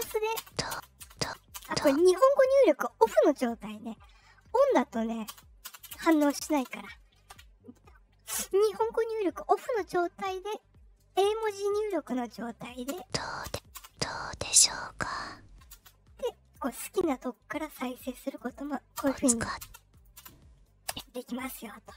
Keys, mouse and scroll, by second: 0.0-1.8 typing, 5.2-6.6 typing, 12.8 space, 13.4 space, 13.7 space, 15.7 space, 16.5 click, 17.1 click, 17.5 click, 18.1 click, 18.5 click, 18.9 space, 19.5 space, 19.9 click, 20.1 space, 20.8 space, 21.8 click.